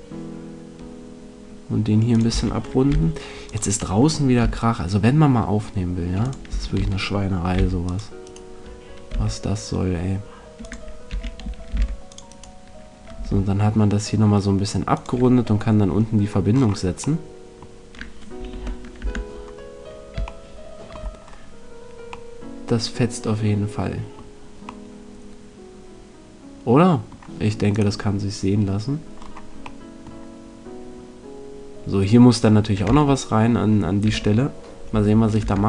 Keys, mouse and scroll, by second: 2.1-3.7 drag, 2.2 a, 2.8 c, 3.7 middle click, 5.4 g, 6.2 click, 6.4 a, 7.5 c, 8.3-10.6 right drag, 9.0 g, 10.6 click, 11.3 a, 11.7 c, 13.2 right click, 13.2 g, 15.0 click, 18.5 z, 19.0 Tab, 24.8 middle click, 27.7-29.6 right drag, 29.1 middle click, 31.3-32.8 middle drag, 32.8 Tab, 34.0 Tab, 35.4 Tab.